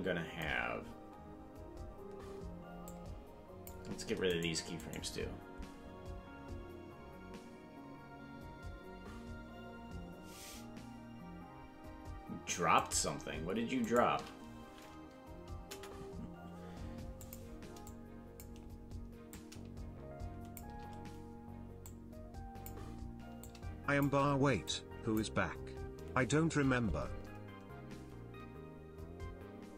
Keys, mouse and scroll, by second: 2.8 click, 4.3 right click, 4.8 right click, 12.8 shift+right click, 13.9 shift+right click, 15.6 Delete, 17.9 click, 19.3-20.6 drag, 21.8 click, 23.4 shift+click, 24.7 click.